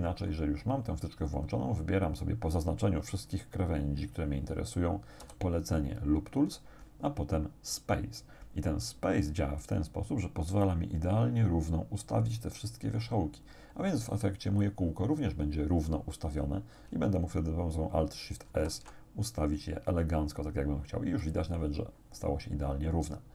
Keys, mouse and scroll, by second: 5.2 w, 9.6 click, 18.5 alt+shift+s, 21.2 click, 22.4-23.0 scroll down 2.